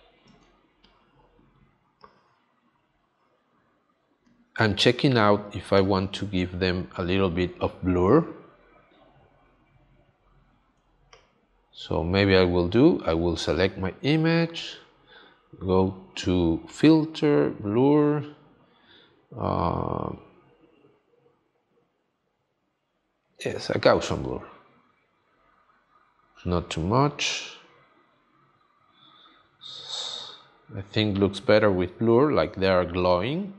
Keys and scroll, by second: 0.3 space.